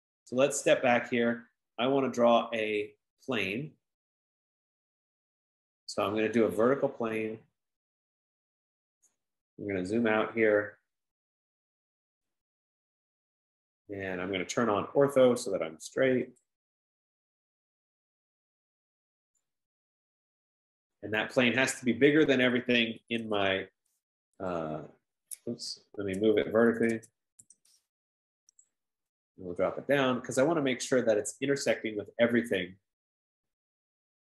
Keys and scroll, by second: 1.6 F15, 23.5 typing, 26.0 Escape, 27.3-28.0 typing.